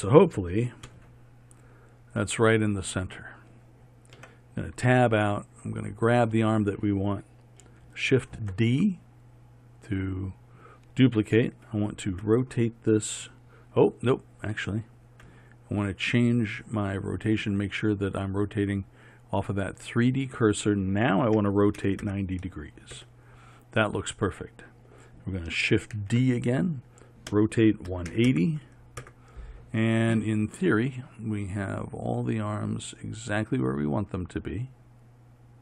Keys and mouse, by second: 1.0 KP_3, 4.3 Tab, 5.7-7.8 drag, 8.2 shift+d, 12.2 r, 16.9-19.7 drag, 21.5 r, 26.1 shift+d, 27.4 r.